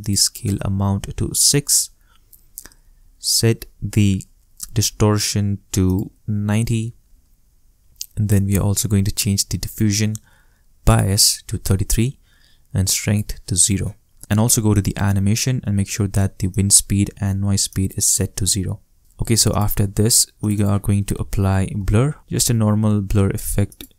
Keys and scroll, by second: 1.2 shift+6, 1.7 shift+Return, 6.2-7.2 typing, 7.4 shift+Return, 11.4 shift+3, 19.0 shift+space, 21.1-22.4 typing.